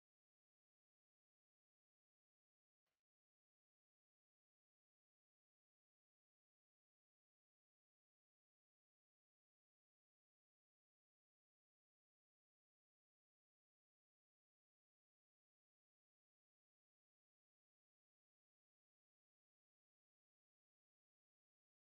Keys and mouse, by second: 16.8-21.9 drag.